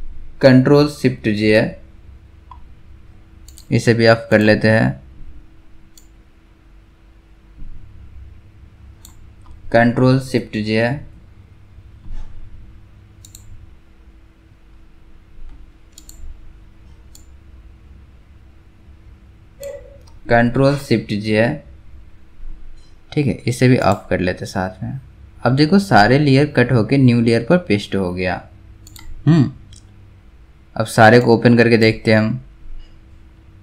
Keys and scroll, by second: 1.4 ctrl+shift+j, 10.9 ctrl+shift+j, 21.2 ctrl+shift+j.